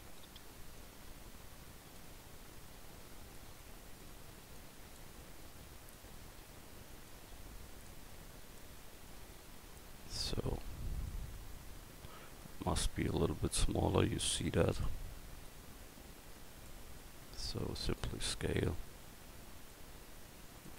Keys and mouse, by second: 3.8 middle click, 6.3 middle click, 7.9-8.3 drag, 10.4 click, 12.4-14.9 middle drag, 15.5-16.7 drag, 17.1 s, 18.7 click.